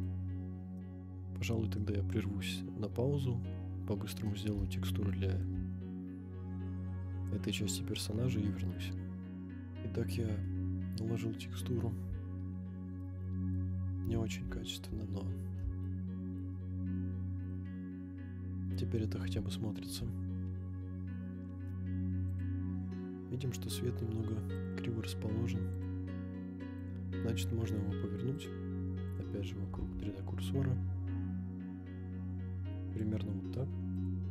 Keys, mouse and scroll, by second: 0.7-1.5 middle drag, 1.8-4.3 middle drag, 4.8-5.4 shift+middle drag, 5.7 scroll up 2, 7.9-8.8 scroll up 1, 9.4-10.0 scroll up 5, 13.0-13.5 middle drag, 13.0 scroll up 1, 13.6 scroll up 2, 14.3-14.8 shift+middle drag, 15.1 scroll up 3, 15.8-16.4 shift+middle drag, 17.0 scroll down 4, 17.5-19.0 middle drag, 19.8 KP_0, 20.6 scroll down 2, 21.2-22.0 scroll down 2, 22.3 click, 24.5 click, 25.7 click, 26.8 click, 27.1-27.5 scroll down 2, 27.5 scroll up 1, 28.3-29.3 drag, 29.7 r, 29.8 z, 33.0-34.0 drag.